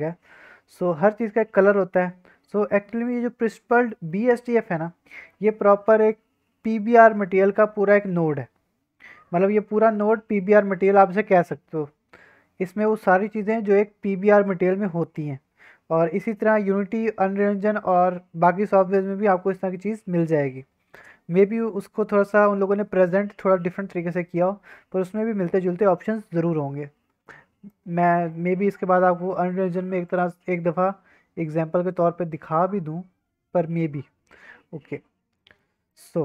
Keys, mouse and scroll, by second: 2.1-3.0 scroll down 3, 3.0 click, 3.2-4.4 scroll up 6, 3.8 middle click, 4.4-4.7 scroll down 3, 4.7 scroll up 1, 4.8-6.7 scroll down 3, 5.1 middle click, 9.0-9.3 scroll up 2, 9.3 scroll down 1, 12.4-12.7 scroll up 2, 13.2-13.6 scroll up 3, 13.6-14.6 scroll down 4, 14.6-15.4 scroll up 3, 16.0-16.5 scroll up 2, 18.9-19.8 scroll down 3, 19.8-21.0 scroll up 4, 21.0-21.4 scroll up 1, 21.4-21.8 scroll down 1, 21.8 middle click, 22.0 scroll down 1, 24.1-24.7 scroll up 4, 26.8-27.6 scroll up 2, 27.6-28.3 middle drag, 34.2-34.5 scroll down 2, 34.5-35.3 scroll up 4, 35.3 middle click, 35.8 click.